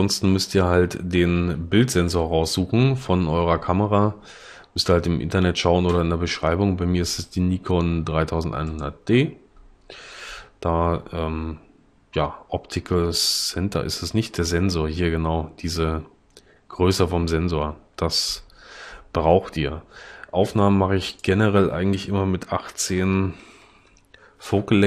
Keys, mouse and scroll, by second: 22.5 1, 23.1 8, 23.7 Return.